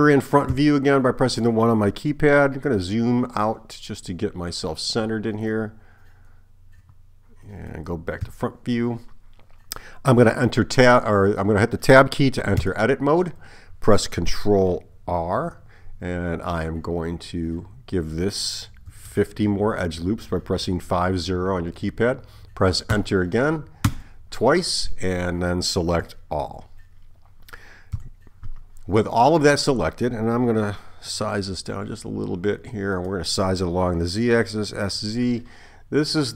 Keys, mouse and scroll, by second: 0.5 KP_1, 8.2 KP_1, 12.6 Tab, 15.2 ctrl+r, 26.1 a, 28.0 KP_1, 31.6 s, 34.6 s.